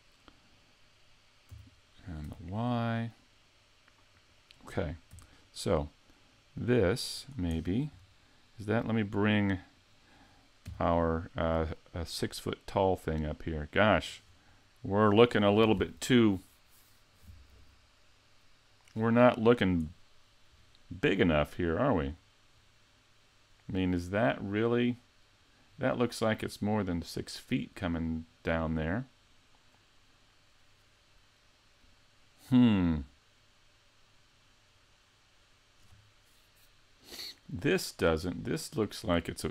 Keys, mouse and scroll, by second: 1.5 s, 4.3 click, 5.1 g, 7.3 click, 7.5-8.4 scroll down 7, 8.9 right click, 9.7 right click, 10.7 g, 14.2-17.5 scroll up 1, 17.5 scroll up 1, 19.9-21.4 scroll down 2, 21.4-22.1 scroll down 3, 22.1-24.5 scroll up 3, 24.5 middle click, 25.7 scroll down 3, 38.0-39.5 scroll down 3.